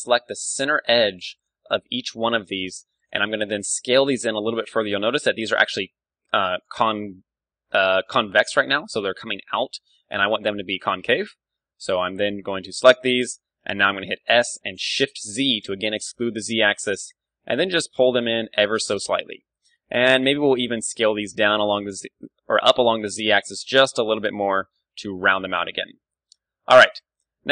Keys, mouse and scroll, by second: 5.0-6.7 right drag, 5.4-7.8 d, 5.7-7.4 drag, 8.0-9.6 right drag, 8.0 d, 9.2 d, 9.6-10.8 drag, 10.8 middle click, 11.7-13.0 drag, 13.0-14.8 middle drag, 14.2 s, 18.8-20.7 drag, 20.7-22.8 middle drag, 20.7 s, 23.3-25.0 drag, 23.4 Tab, 24.4 KP_1, 25.0-27.5 middle drag, 25.5 Tab, 26.0 a.